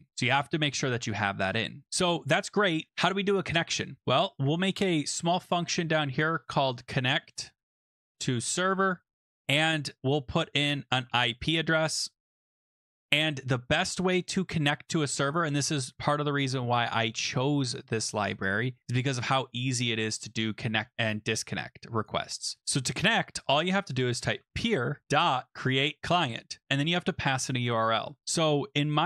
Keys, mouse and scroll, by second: 1.8 click, 1.8-2.9 scroll, 3.5 click, 4.0 Return, 4.9-9.6 typing, 10.3 Left, 10.6-12.8 typing, 14.1 click, 15.3 click, 16.2-16.8 scroll, 18.0-18.8 scroll, 18.8-19.4 scroll, 19.4-20.1 scroll, 20.1-20.9 scroll, 22.0 click, 22.6 scroll, 22.8 click, 23.8-26.3 typing, 28.7-29.0 typing.